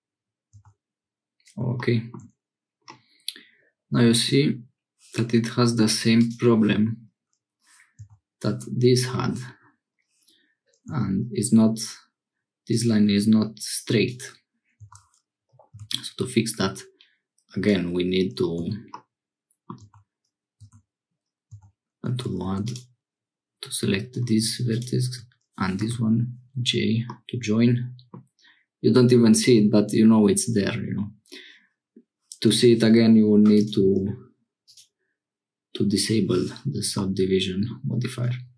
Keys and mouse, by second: 0.6 Tab, 2.9-4.3 drag, 8.0 Tab, 10.9 Tab, 12.7-14.1 drag, 14.9 Tab, 15.8 ctrl+r, 18.6 Tab, 18.9-20.0 middle drag, 19.8 Tab, 20.6 1, 21.5 Tab, 22.1 Tab, 22.4 1, 25.9 j, 27.1-28.2 middle drag, 29.3 click, 33.5 click, 34.6 click, 37.0 middle click.